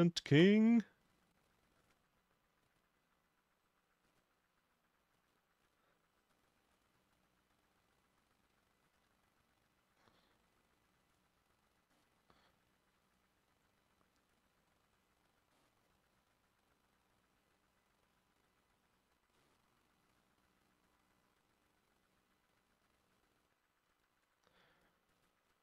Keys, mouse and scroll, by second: 0.4 Insert, 0.4-2.4 drag, 5.7-10.8 drag, 12.0 middle click, 13.1 double click, 14.4 double click, 15.6 middle click, 16.1 double click, 16.4 double click, 17.6 double click, 18.5 double click, 18.9 double click, 19.4 middle click.